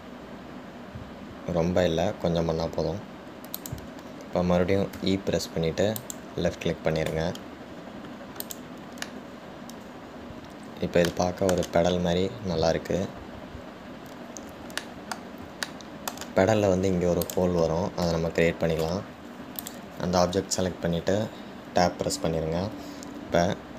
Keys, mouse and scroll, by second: 8.9 scroll down 2, 9.6 click, 10.2-13.7 middle drag, 13.7-15.9 scroll up 2, 16.0-18.4 middle drag, 18.4 click, 20.8 click.